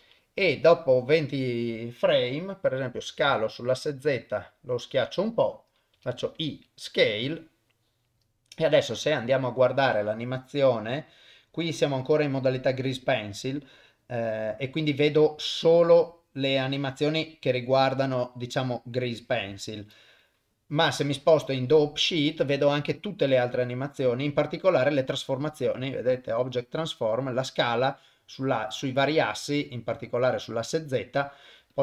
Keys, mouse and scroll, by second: 0.7 click, 3.1 s, 6.0 i, 8.6 click, 9.4-15.5 drag, 16.3-20.3 drag, 16.3 middle click, 26.5 click, 31.7 click.